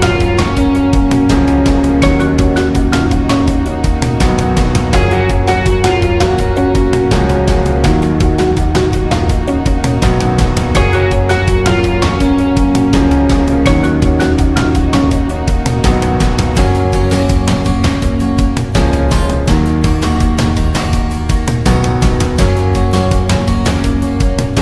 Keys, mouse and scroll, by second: 0.7 alt+scroll down 1, 1.0 space, 1.1 click, 1.5 space, 2.0-2.4 alt+scroll up 1, 2.4 space, 2.6-5.5 drag, 5.5 click, 5.8 alt+scroll down 1, 6.0 space, 6.2 click, 6.4 space, 7.2 alt+scroll up 1, 7.5 space, 7.7 click, 8.1 space, 8.6 alt+scroll down 1, 8.8 space, 8.9 click, 9.6 alt+scroll up 1, 9.9 space, 10.0-11.2 drag, 11.3 right click, 12.3 click, 15.7 click, 15.8-18.9 drag, 21.3-24.6 drag.